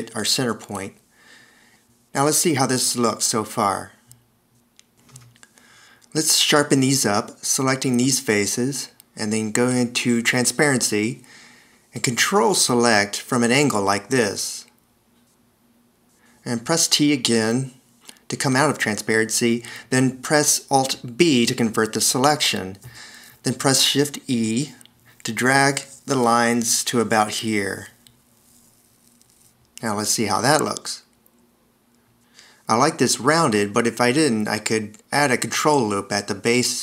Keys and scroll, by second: 3.4 c, 4.8 1, 6.5 v, 10.1 0, 12.7 t, 15.7 d, 19.4 t, 21.6 alt+b, 24.8 shift+e, 31.0 c, 33.0 Escape.